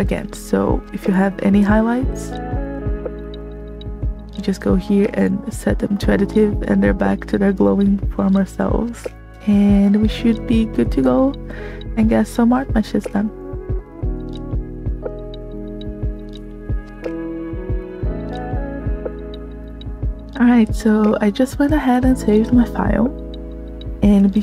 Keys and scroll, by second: 8.9 space.